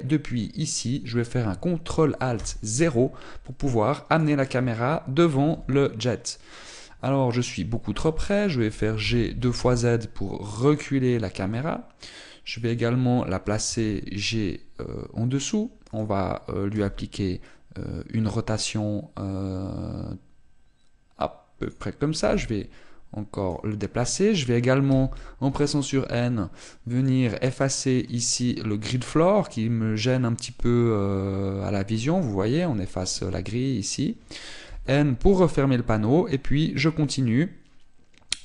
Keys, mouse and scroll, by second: 1.3-2.3 scroll up 1, 3.1 ctrl+alt+KP_0, 4.8 right click, 6.2 g, 8.1 click, 9.7 g, 13.4 click, 14.3 g, 16.7 click, 17.4 r, 22.5 click, 22.9 g, 24.1 click, 25.6 n, 26.3-27.3 scroll up 8, 27.3 scroll up 1, 27.7 click, 29.5 click, 32.8 click, 34.5 click, 35.3 n, 36.0 scroll up 2, 36.4-37.7 scroll down 1.